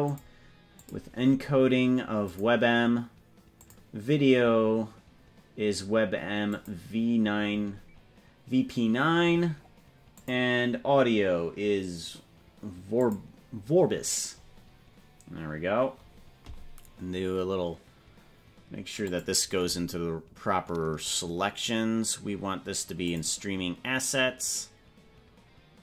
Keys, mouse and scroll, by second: 0.1 click, 0.9-2.5 drag, 3.7-6.7 drag, 10.1-13.3 drag, 14.5 scroll down 5, 19.0 click.